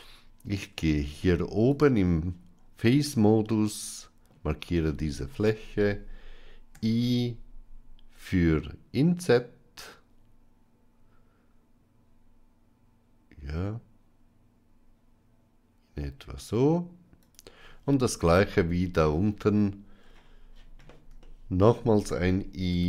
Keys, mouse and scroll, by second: 0.6 Tab, 1.5 click, 2.8-4.2 middle drag, 4.9 shift+middle click, 6.7 i, 21.1 shift+middle click.